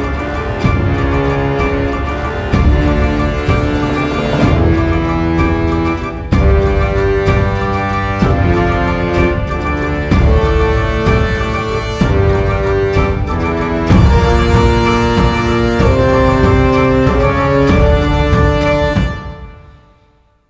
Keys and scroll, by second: 18.8 space.